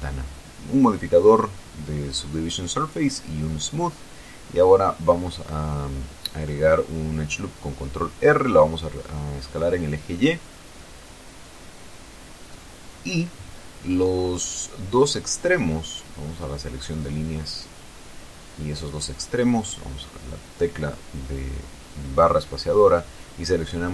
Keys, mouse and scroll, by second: 0.4 click, 2.6 right click, 3.5 Tab, 5.3 ctrl+r, 7.5 click, 8.0 click, 9.3 s, 9.7 y, 13.2 click, 13.7 middle click, 17.0 click, 18.3 right click, 20.2 shift+right click, 22.9 space.